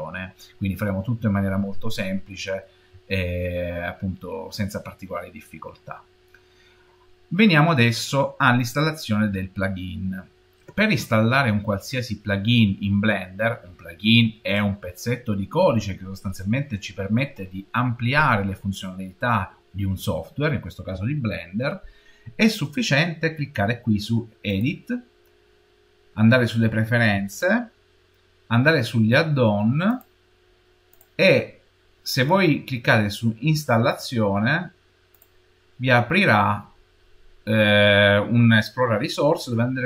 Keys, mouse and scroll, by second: 1.7 shift+middle click, 24.3 click.